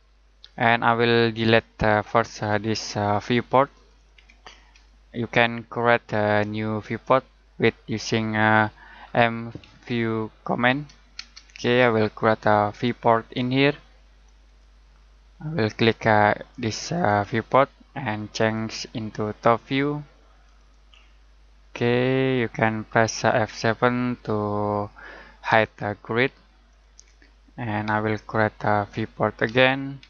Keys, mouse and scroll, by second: 4.1 Delete, 9.0-9.6 typing, 11.1 space, 12.7 click, 21.7 scroll down 1, 21.9 middle click, 25.5 F7, 26.6 click, 29.4-30.0 typing.